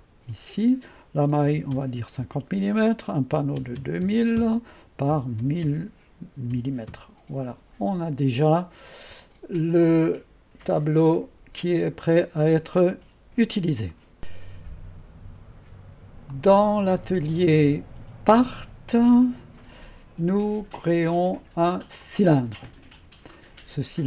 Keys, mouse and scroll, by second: 0.0 click, 1.4 typing, 2.2 Return, 3.1-7.6 typing, 9.8 click, 11.1 click, 11.7 drag, 11.9 drag, 13.7-14.4 typing, 14.3 click, 16.4 click, 18.3 click, 22.1 click, 22.5 click.